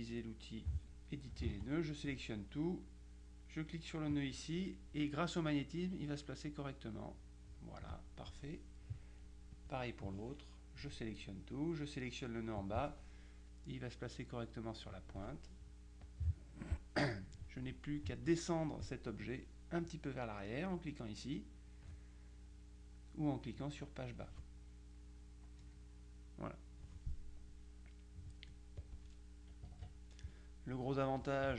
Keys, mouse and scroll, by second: 1.6 ctrl+a, 4.2-8.1 drag, 9.6 click, 12.7-15.5 drag, 16.1 click, 25.7 Page_Down, 27.5-28.8 middle drag, 28.8 click, 29.8 KP_Subtract, 30.8 middle click.